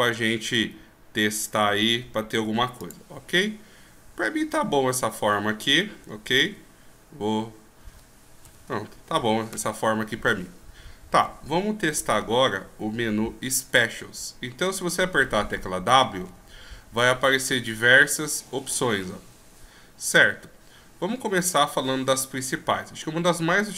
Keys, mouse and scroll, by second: 5.2 e, 12.1-12.7 ctrl+scroll up 3, 12.7 ctrl+scroll down 1, 12.9 ctrl+scroll up 1, 16.4 w.